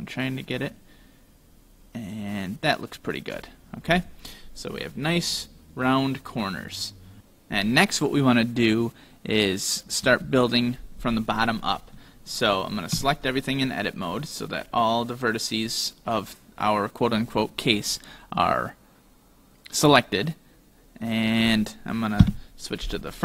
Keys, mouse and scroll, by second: 4.3-4.9 scroll up 2, 4.9-5.4 scroll down 2, 5.4 middle click, 10.0 KP_1, 13.0 a, 14.3 middle click, 22.3 KP_1.